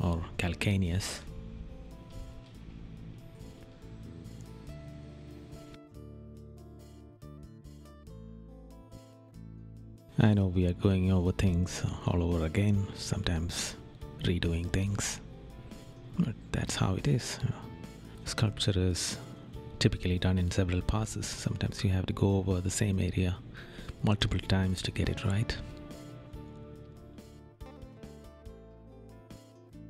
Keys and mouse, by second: 0.9 right click, 1.4 right click, 1.8 right click, 3.6 right click, 6.2 right click, 9.0 right click, 9.8 right click, 13.0 right click, 14.0 right click, 14.7 right click, 19.7 right click, 21.4 right click, 23.2 right click, 24.1 right click, 26.7 right click, 27.7 right click, 28.5 right click, 29.7 right click.